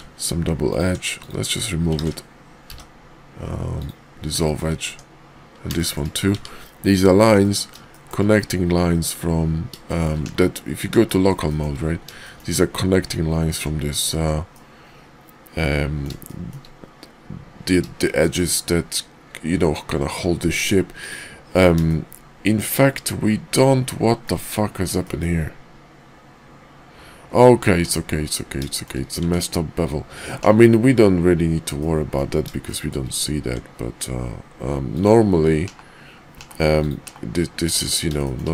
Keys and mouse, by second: 0.6 alt+click, 1.1 x, 2.0 ctrl+z, 2.6 x, 4.4 shift+middle click, 4.9 Tab, 5.7 shift+middle click, 6.3 Tab, 7.3 middle click, 7.9 shift+middle click, 9.8 shift+middle click, 11.1 shift+middle click, 11.5 shift+middle click, 12.2 shift+middle click, 13.9 alt+click, 14.5-16.0 middle drag, 16.3 shift+middle click, 18.0 shift+middle click, 21.0 click, 21.9-23.6 shift+middle drag, 23.8 middle click, 25.0 shift+middle click, 27.7 Tab, 28.7 shift+middle click, 29.2 Tab, 30.4 /, 31.8 middle click, 32.7 shift+middle click, 33.4 Tab, 35.6 /, 36.3 /, 36.8 click, 37.0 /, 37.7 Tab, 38.2 shift+click.